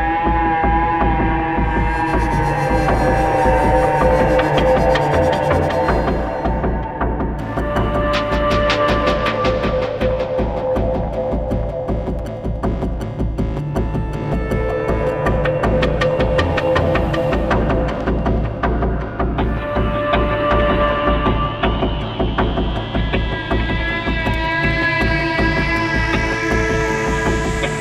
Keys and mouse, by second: 0.0 click, 1.5-2.5 drag, 2.6-3.6 drag, 3.7-6.3 drag, 7.4-9.3 drag, 9.5-10.5 drag, 10.9-15.2 drag, 16.1-17.4 drag, 18.6-20.1 drag, 22.7-27.8 drag.